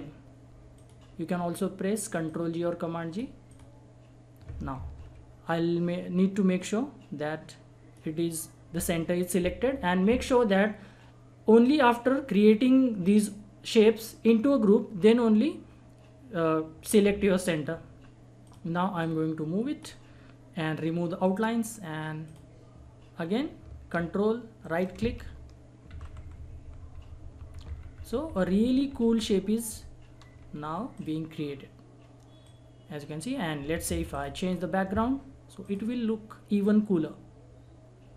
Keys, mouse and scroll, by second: 0.7 click, 1.2 scroll down 1, 2.3 click, 4.7 ctrl+z, 5.4 scroll up 1, 6.5-10.5 drag, 17.6-18.4 scroll down 1, 18.4-21.2 drag, 21.2 right click, 22.2 click, 23.9 ctrl+click, 24.6 ctrl+right click, 25.9 ctrl+r, 30.5 scroll down 1, 30.9 click, 32.9 click, 33.9 ctrl+z, 34.1 click, 34.4 scroll up 1, 35.6 click, 35.6-38.1 drag.